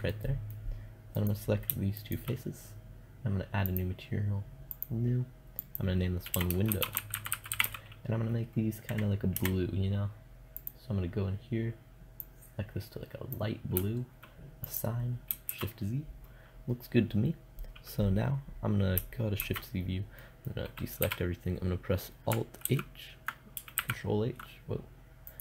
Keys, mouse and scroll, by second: 0.6-7.0 drag, 10.0-11.9 drag, 14.9 shift+z, 18.8 shift+z, 22.1 a, 22.2 alt+h, 23.2 ctrl+h.